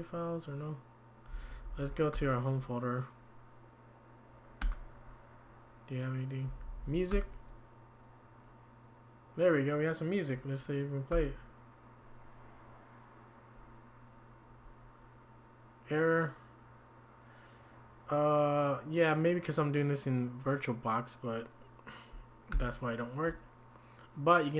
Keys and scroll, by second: 1.0-2.1 typing, 4.6 typing, 6.2-7.1 typing, 11.1 Return, 22.5 q.